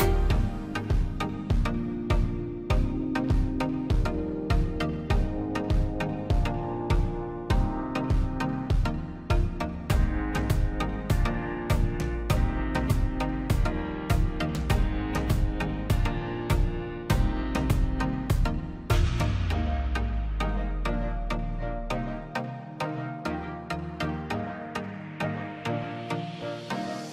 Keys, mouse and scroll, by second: 0.3 click, 0.5 scroll up 1, 0.8 middle click, 1.2-1.7 scroll up 1, 1.7 click, 2.0 scroll up 1, 2.3 middle click, 3.7 scroll up 1, 5.3 click, 5.6 scroll up 1, 6.2 click, 6.3 scroll down 1, 6.6 space, 7.1 p, 7.3 click, 7.9-8.4 scroll down 1, 8.4 middle click, 10.1-10.4 scroll down 1, 10.4 middle click, 10.9 scroll down 1, 11.3 middle click, 11.7 scroll down 1, 12.0-13.1 middle drag, 13.1-13.6 scroll down 1, 16.3 ctrl+z, 16.9 click, 17.4-17.7 scroll up 1, 17.7 click, 19.3 m, 19.9 scroll, 20.3 middle click, 20.6-21.0 scroll down 1, 22.2 scroll up 1, 23.0 click, 23.3-23.9 scroll down 1, 25.5 scroll up 1, 25.8 click.